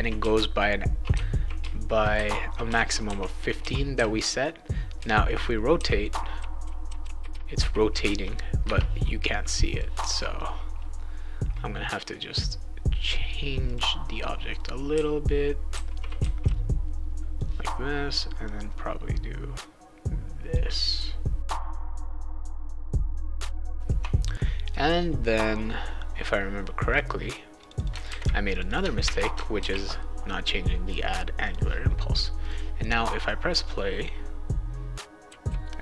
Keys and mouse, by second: 0.0-3.9 typing, 4.9-8.5 typing, 9.7 click, 13.0 click, 13.6 click, 14.6-16.5 right drag, 14.9-16.9 typing, 17.1 click, 18.4-20.5 drag, 21.6 click, 21.8 shift+click, 22.2 click, 23.0 click, 23.2 ctrl+s, 23.2 right click, 23.3 a, 23.7 alt+Tab, 26.9 click, 27.6 click, 27.8 click, 28.0 ctrl+c, 28.5 click, 28.7 click, 29.0 ctrl+v, 29.5 ctrl+s, 31.4 click, 32.4 click, 35.0-35.8 typing.